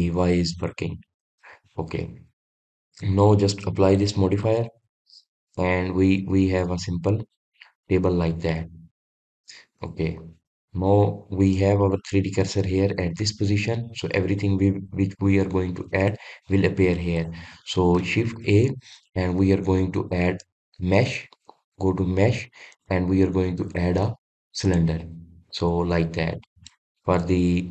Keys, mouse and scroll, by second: 1.6 scroll up 1, 1.9-3.7 scroll down 1, 3.7-4.9 drag, 4.9 scroll up 2, 5.1-5.6 scroll down 2, 5.6-7.7 middle drag, 7.7 scroll up 1, 7.9-8.4 scroll down 1, 8.4-11.1 middle drag, 11.1-12.0 scroll up 1, 17.1 click, 18.1 shift+a, 25.2-27.7 middle drag.